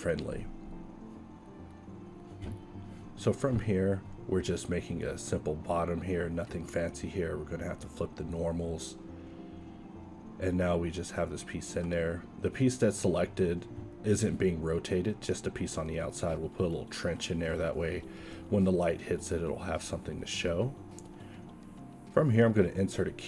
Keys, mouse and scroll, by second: 1.3 ctrl+Tab, 2.5 s, 3.2 g, 4.4 Tab, 5.0-6.6 typing, 8.2 Tab, 9.4 a, 11.1 alt+a, 11.6 Tab, 14.4 middle click, 14.7 ctrl+r, 15.8 ctrl+b, 17.2 e, 17.9 Tab, 19.4 a, 20.6 shift+a, 22.5 q.